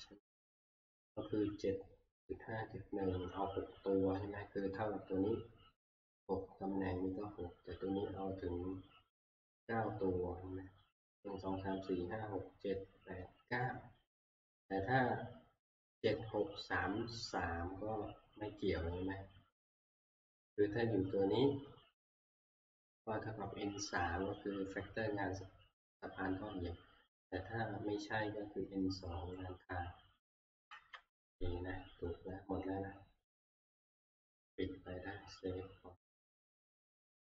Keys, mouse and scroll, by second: 0.3-4.4 drag, 30.9 Tab, 34.4 click, 36.2-37.3 drag.